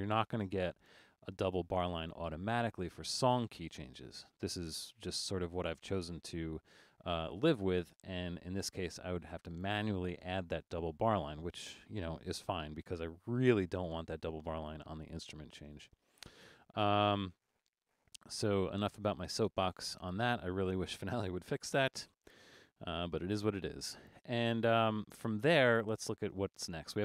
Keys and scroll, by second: 12.6 super+-, 15.7 super+-, 18.1 super+1, 22.4 alt+super+a.